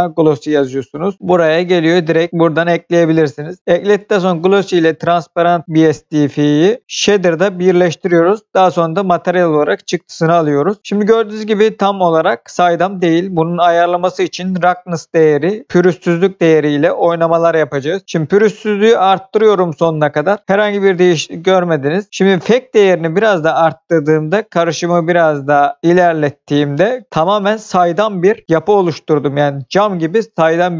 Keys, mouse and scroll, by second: 0.0 BackSpace, 0.1 BackSpace, 1.0 l, 2.3 click, 17.7 click, 22.2 click.